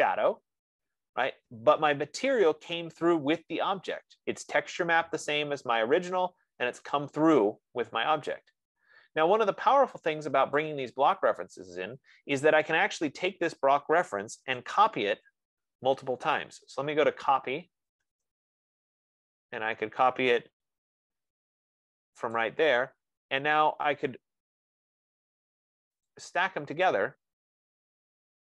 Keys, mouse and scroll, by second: 11.2 click, 13.5 click, 14.8-16.2 typing, 16.2-18.4 right drag, 18.4 Return, 20.0 scroll up 2, 20.6 scroll up 1, 23.1 click, 25.6-28.4 drag.